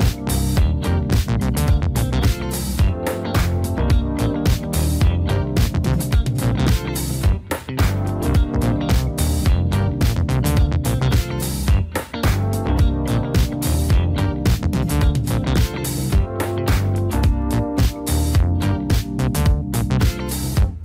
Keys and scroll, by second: 0.1 Up, 0.3 Up, 0.5 Up, 0.7 Up, 1.0 Up, 1.1 Up, 1.3 Up, 1.5 Up, 1.8 Up, 2.7 Up, 2.7 Down, 2.7 Right, 2.7 Left, 2.9 Right, 5.3 Down, 8.3 Down, 11.2 Up, 11.8 Up, 12.6 Down, 13.3 Down, 14.2 Up, 14.4-18.7 typing.